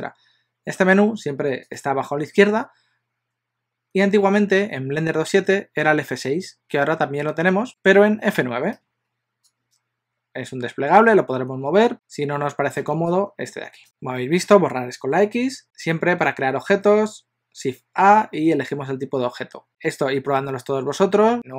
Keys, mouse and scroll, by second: 8.6 F9, 15.6 shift+a.